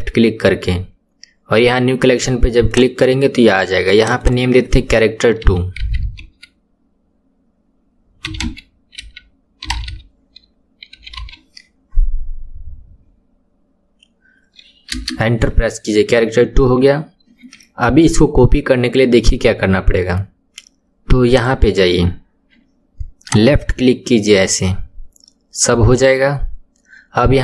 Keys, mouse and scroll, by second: 4.0 click, 4.2-7.3 drag, 21.3 click, 22.2-22.8 scroll down 3, 23.2 drag.